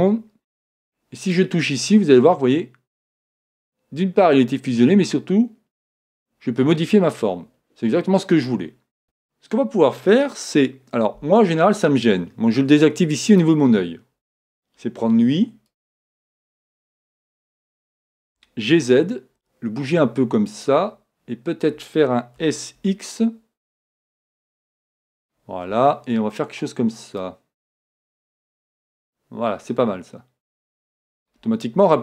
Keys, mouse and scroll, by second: 1.3-3.3 drag, 9.0 a, 13.3-15.2 drag, 15.1 b, 18.4 g, 20.6-22.5 drag, 22.5 s, 25.0-26.9 drag, 27.2-29.1 drag.